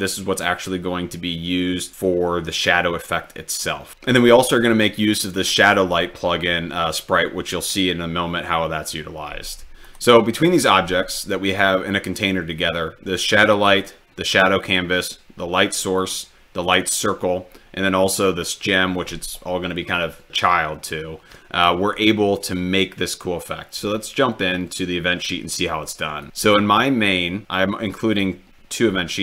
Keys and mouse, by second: 9.9 click, 10.6 click, 13.6 click, 14.6 click, 16.1 click, 18.2 click.